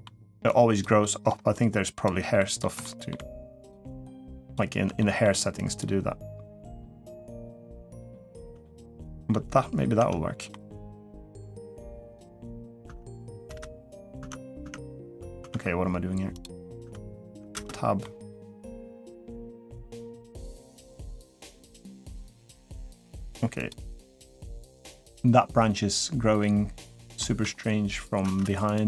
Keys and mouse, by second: 0.2 click, 0.8 middle click, 1.3 click, 2.2 middle click, 2.6 shift+middle click, 3.4 click, 4.2 click, 4.8 shift+middle click, 5.4 click, 6.3 middle click, 7.2 middle click, 7.9 shift+middle click, 8.4 middle click, 9.9 Tab, 10.3 middle click, 11.8 click, 12.6 Tab, 13.2 space, 14.0 Tab, 14.4 Tab, 15.2 ctrl+Tab, 16.6 Tab, 17.0 Tab, 17.3 space, 17.8 middle click, 18.8-19.5 drag, 19.6 middle click, 20.6-21.9 middle drag, 22.3 middle click, 23.3 click, 24.4-26.6 middle drag, 27.0 shift+drag, 28.0 space.